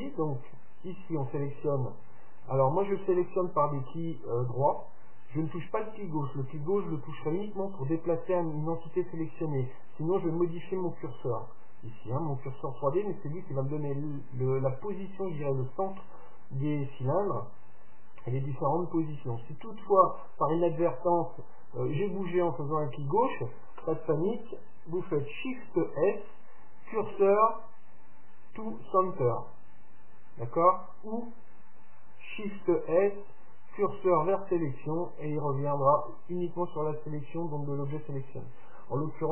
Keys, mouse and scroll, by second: 21.5-23.4 drag, 25.7 shift+s, 32.7 shift+s.